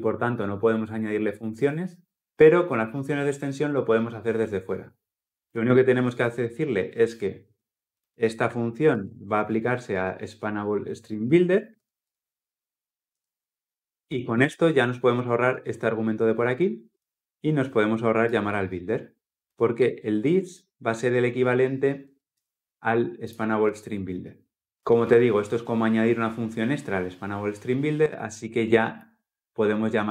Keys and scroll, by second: 8.7 ctrl+c, 11.5 ctrl+v.